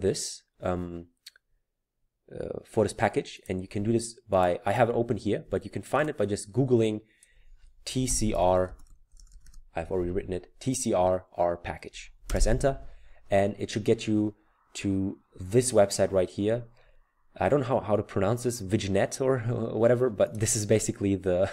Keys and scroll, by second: 7.6-9.3 typing, 12.3 Return.